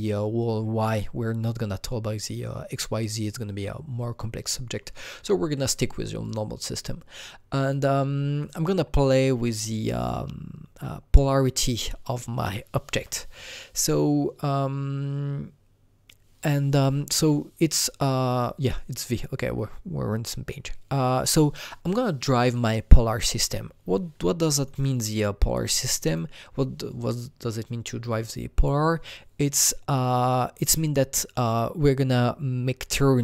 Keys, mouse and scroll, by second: 6.2 click, 6.2 scroll down 1, 6.3 click, 8.4 click, 24.2-28.7 drag.